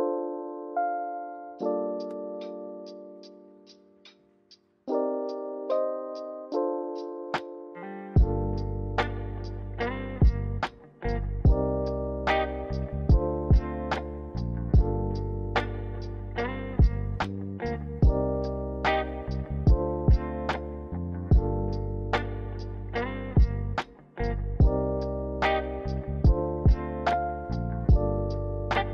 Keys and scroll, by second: 2.2-3.0 typing, 4.1 typing, 6.9-7.7 typing, 9.0 ctrl+z, 9.2 ctrl+z, 9.3 ctrl+z, 15.9 ctrl+c, 16.2 ctrl+v.